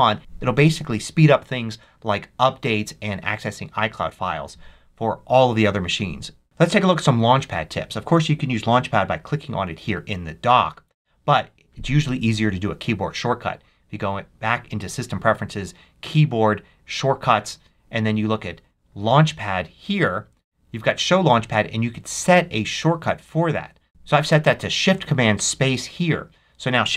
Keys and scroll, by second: 11.1 Escape, 23.9 shift+super+space.